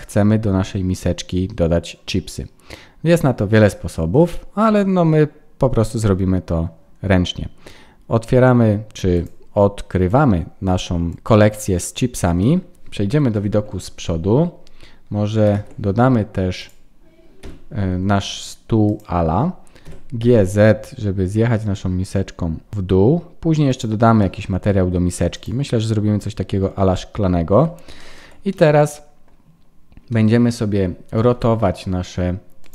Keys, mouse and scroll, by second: 9.1 click, 11.0 click, 12.0-13.3 scroll down 4, 12.3 middle click, 13.3 KP_1, 14.6 scroll up 1, 15.5 alt+h, 16.5 click, 17.3 h, 17.6-18.0 scroll down 5, 18.0-18.8 scroll up 4, 18.8 click, 18.8-19.2 scroll up 1, 19.8 g, 24.2 middle click, 25.3 click, 26.2-26.8 scroll up 1, 26.8-27.9 scroll up 5, 28.0 shift+middle click, 28.5 middle click, 30.1 middle click, 31.2 r.